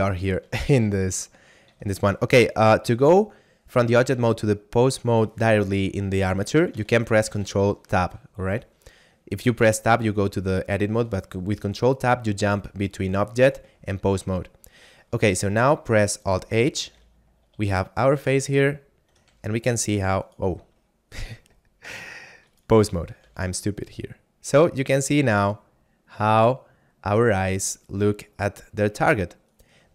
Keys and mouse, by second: 1.7 ctrl+Tab, 3.9 ctrl+Tab, 6.3 ctrl+Tab, 6.8 ctrl+Tab, 7.3 ctrl+Tab, 8.4 a, 9.4 right click, 13.5 click, 15.3 middle click, 16.6 alt+h, 17.5 a, 18.3 right click, 18.8 shift+middle click, 19.4 g, 20.2 right click, 21.7 ctrl+Tab, 22.5 right click, 23.3 g, 29.3 right click.